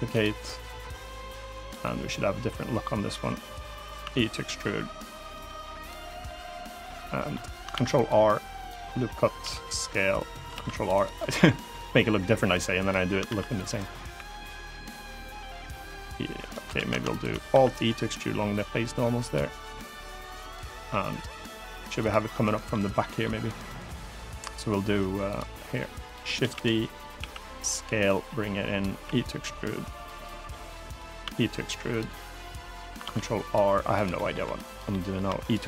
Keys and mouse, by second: 0.3-1.4 drag, 1.5-2.5 middle drag, 2.9 click, 3.7 e, 4.9 click, 5.2 middle click, 5.5 click, 5.8 middle click, 6.6 middle click, 7.4 ctrl+r, 8.3 right click, 8.5 middle click, 9.1 s, 9.9 click, 10.3 ctrl+r, 10.6 click, 10.9 middle click, 11.5-12.6 drag, 13.0 ctrl+r, 13.5 click, 13.9 3, 14.1 click, 14.8-16.2 drag, 16.5 ctrl+z, 16.9 shift+click, 17.2 alt+e, 20.1 click, 20.4 middle click, 20.8 click, 21.0 middle click, 21.7 click, 22.0 middle click, 22.6 middle click, 23.5 middle click, 25.8 click, 26.1 shift+d, 26.9 s, 27.3 click, 27.8 click, 28.7 e, 29.7 click, 29.9 middle click, 30.9 e, 31.6 click, 31.8 middle click, 32.8 ctrl+r, 33.7 click, 33.9 middle click, 34.2 3, 34.6 middle click, 35.0 e, 35.1 click.